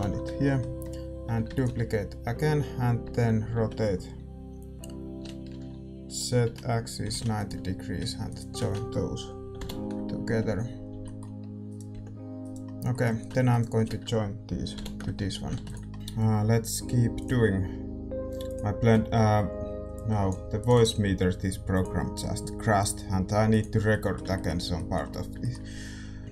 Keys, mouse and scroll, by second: 1.4 shift+d, 3.0 r, 8.2-10.7 right drag, 9.5 ctrl+j, 10.7 ctrl+k, 10.7 middle click, 10.9 a, 11.6-14.7 drag, 11.6-15.9 right drag, 11.9 g, 14.7 ctrl+j, 15.2 a, 15.9 ctrl+s, 15.9-26.3 middle drag, 15.9 a, 26.2 Tab, 26.2 right click.